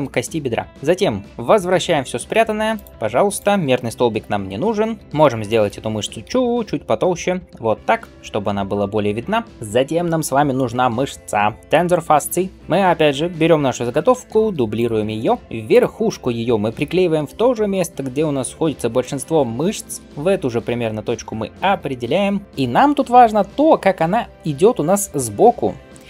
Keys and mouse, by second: 0.6-6.4 alt+shift+middle drag, 0.7 alt+Tab, 1.8 alt+h, 2.6 click, 4.0 h, 5.0 Tab, 5.5-7.3 drag, 6.1 alt+s, 7.3 middle click, 7.5 Tab, 7.9-9.4 drag, 9.4-15.6 middle drag, 14.1 shift+d, 15.4 Tab, 15.6 click, 15.6-21.8 middle drag, 20.0 ctrl+g.